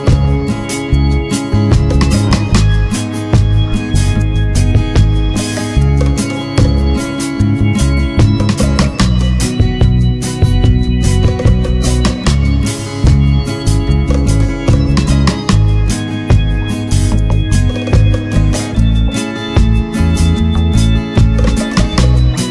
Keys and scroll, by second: 9.7 ctrl+-.